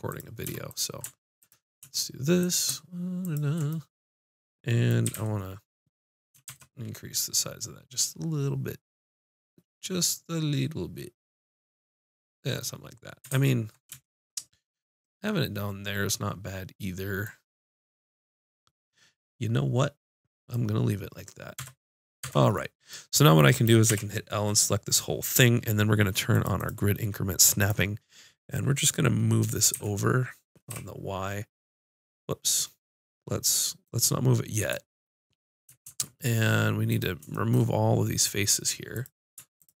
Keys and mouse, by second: 5.0 s, 5.9-8.2 middle drag, 8.8-12.3 middle drag, 12.3 click, 13.3 ctrl+z, 15.9 middle click, 16.1 middle click, 17.2 middle click, 17.5 middle click, 18.0 middle click, 18.2 middle click, 18.7-21.0 middle drag, 21.1 middle click, 21.5 Tab, 22.2 Tab, 22.5 click, 23.0 click, 23.9 l, 26.3-29.0 drag, 29.6 g, 35.8 ctrl+Tab, 38.2-39.8 drag.